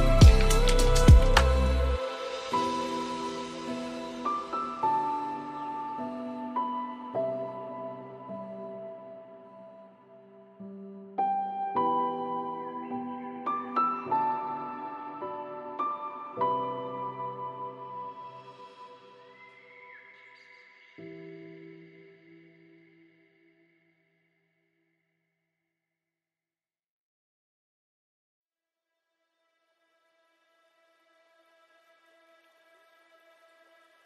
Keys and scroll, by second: 0.3 ctrl+space, 8.2 ctrl+alt+s, 16.5 ctrl+alt+s, 28.0 ctrl+alt+shift+e.